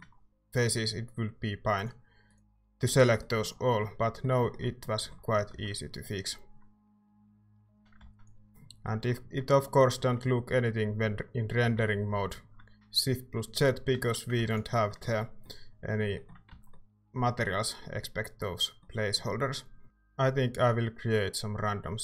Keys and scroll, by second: 2.9 Tab, 5.5 z, 7.9 z, 8.0 ctrl+s, 11.6 z, 14.0 z, 14.4 ctrl+s, 16.5 Tab, 19.8 c.